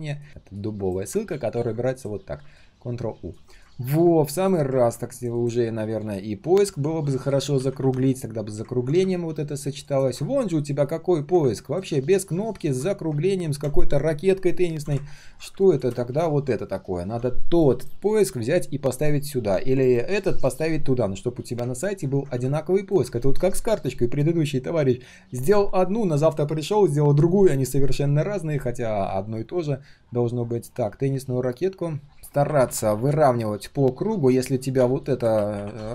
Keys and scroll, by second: 1.5 ctrl+u.